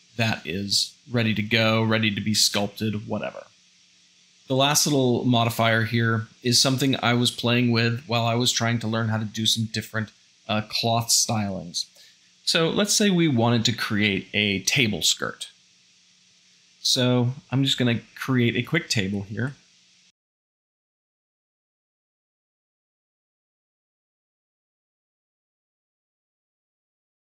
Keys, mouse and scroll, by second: 2.3 Tab, 4.0 x, 16.4 shift+a, 19.4 s, 20.3 middle click, 20.8 Tab, 20.8-27.2 typing, 21.2 middle click, 22.5 Tab, 23.8 shift+click, 24.8 click, 26.9 ctrl+j, 27.0 shift+middle drag.